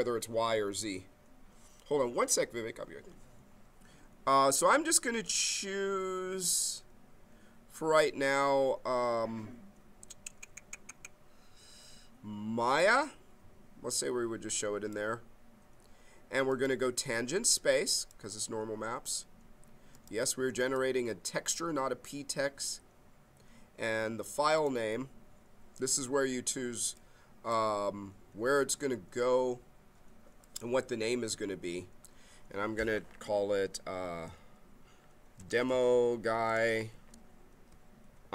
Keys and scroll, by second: 35.1-37.3 typing.